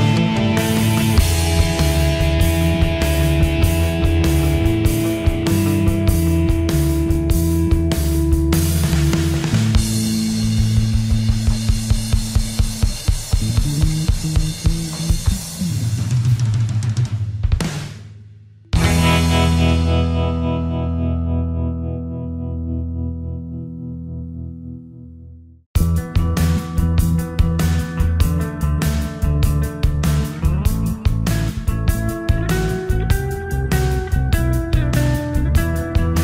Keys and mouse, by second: 12.2 middle click, 24.1 click, 30.4-36.2 typing.